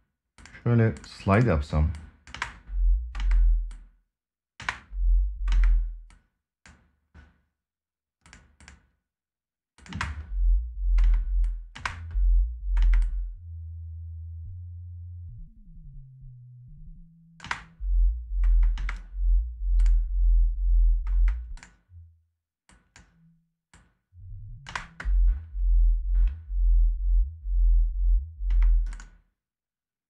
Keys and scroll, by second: 2.0 space, 4.3 space, 9.6 space, 17.2 space, 20.8 space, 24.4 space, 28.2 space.